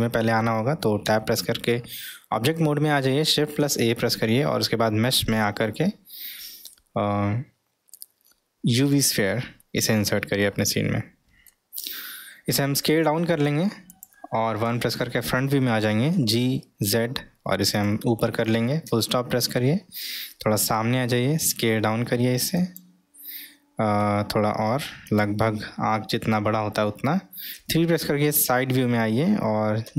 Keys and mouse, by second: 1.1 Tab, 10.8-11.5 middle drag, 12.6 s, 16.1 g, 21.1 s, 24.0 s, 29.8 g.